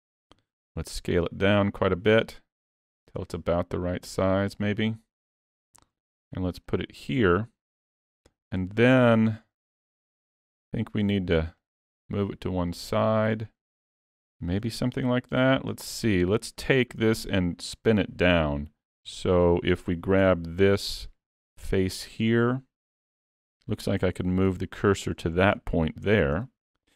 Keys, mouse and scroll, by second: 0.4 s, 5.7 g, 7.0 scroll up 4, 7.4 shift+middle click, 7.9 middle click, 9.6 shift+middle click, 11.6 click, 13.0 middle click, 13.5-13.9 scroll up 5, 14.0 scroll down 3, 14.7-15.4 scroll down 7, 15.4 middle click, 16.2 scroll up 4, 16.7 shift+middle click, 19.1 Tab, 20.2 3, 20.8 click, 21.7 middle click, 23.7-24.1 scroll up 1, 24.2 shift+s, 25.0 scroll down 1, 25.3 shift+middle click, 26.1 Tab, 26.4 middle click.